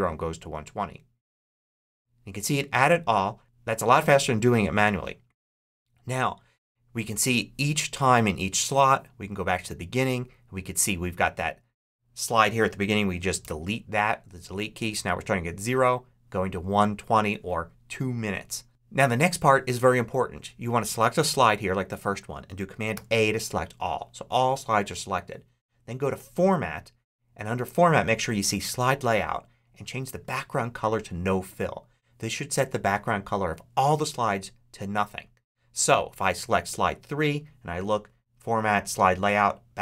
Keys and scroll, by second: 13.3 BackSpace, 22.8 super+a.